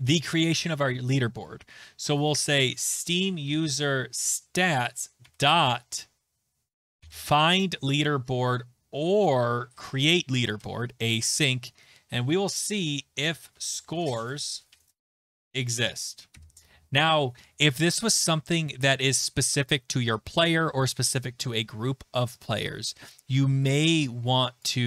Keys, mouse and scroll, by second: 0.0-0.3 typing, 0.4 middle click, 2.3-3.9 typing, 4.6 Down, 4.7 Return, 5.2 ., 6.7-7.7 typing, 8.8 Down, 9.6 Down, 9.6 Return, 10.6 Return, 12.4-16.8 typing, 15.8 Right, 24.6 click.